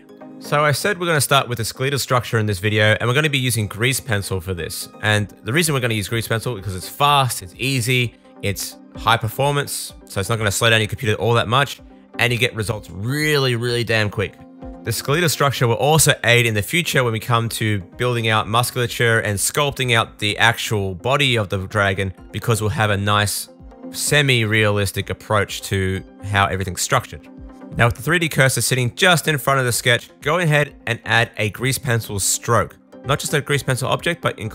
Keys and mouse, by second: 0.0 click, 0.2-5.7 drag, 1.6 g, 5.7 shift+middle click, 5.9-15.0 drag, 6.5 s, 8.0 g, 12.9 super+s, 15.0-19.9 middle drag, 19.9 click, 20.0 middle click, 20.7-28.8 drag, 21.8 shift+a, 28.8-30.7 middle drag.